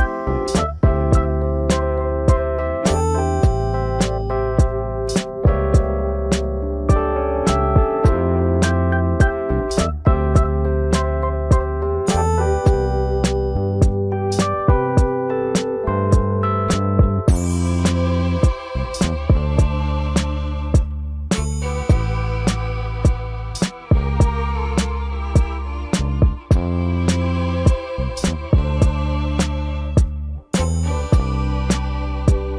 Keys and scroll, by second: 4.7 s, 8.1 ctrl+space, 9.7 m, 13.9 shift+space, 15.0 m, 18.4 shift+space, 18.4 Escape, 26.2 s, 28.6 ctrl+space, 29.0 typing, 30.8 space.